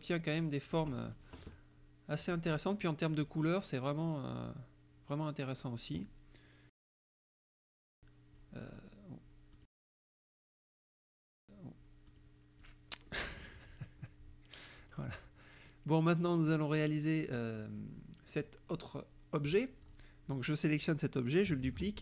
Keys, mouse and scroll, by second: 0.4 click, 2.3-2.8 drag, 3.3 click, 12.1 click, 12.6 click, 13.1 middle click, 17.3 click, 19.8 click, 21.6 ctrl+d.